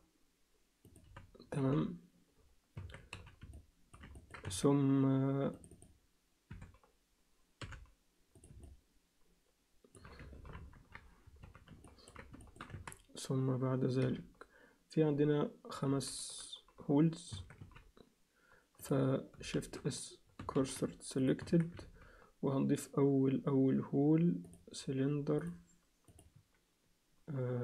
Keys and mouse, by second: 1.0 f, 1.6 z, 2.8 Tab, 3.1 z, 3.5 alt+middle click, 4.2 ctrl+alt+middle click, 4.5 Tab, 5.5 click, 5.7 click, 6.5 e, 8.6-9.9 alt+middle drag, 10.5 ctrl+KP_1, 11.4 z, 11.8 ctrl+alt+middle click, 12.4 alt+shift+middle click, 12.7 Tab, 14.0 g, 17.3 Tab, 17.6 z, 19.5 shift+s, 20.6 shift+s, 21.4 Tab, 21.9 shift+a, 25.4 click, 26.1-27.6 drag.